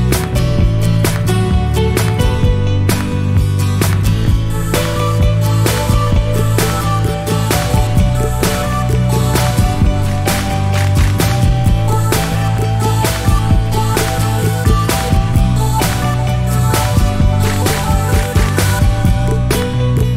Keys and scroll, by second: 4.3-5.5 typing, 7.7 typing, 13.0-13.9 typing.